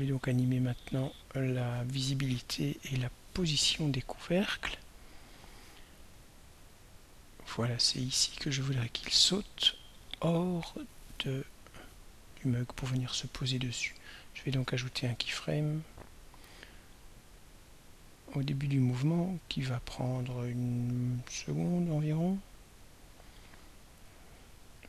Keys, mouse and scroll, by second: 0.9 click, 4.7-10.8 drag, 14.7 click, 15.9 click, 19.5 click, 20.7 click, 21.7 click.